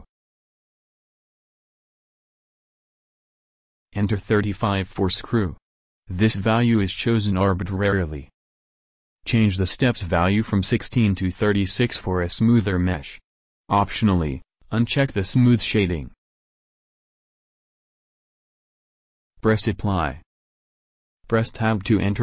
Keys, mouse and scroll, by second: 0.6-2.8 middle drag, 4.1-5.5 drag, 10.1-11.5 drag, 15.3-16.6 drag, 16.6 middle click, 20.3-21.8 drag, 21.2 Tab.